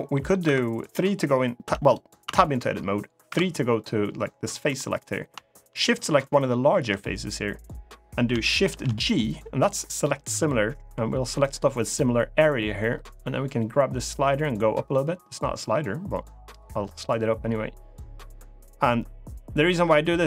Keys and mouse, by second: 0.2 3, 1.4 Tab, 2.0 Tab, 3.0 3, 4.4 middle click, 5.5 click, 8.4 shift+g, 13.8-20.2 drag.